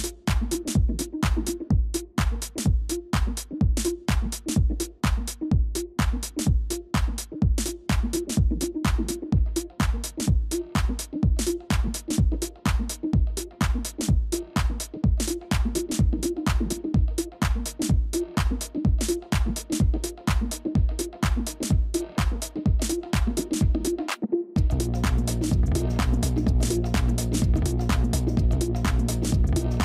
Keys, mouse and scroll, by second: 3.5 ctrl+-, 6.4 space, 6.6 ctrl++, 6.7 ctrl++, 7.9 ctrl+-, 11.2-12.3 scroll up 1, 12.3 right click.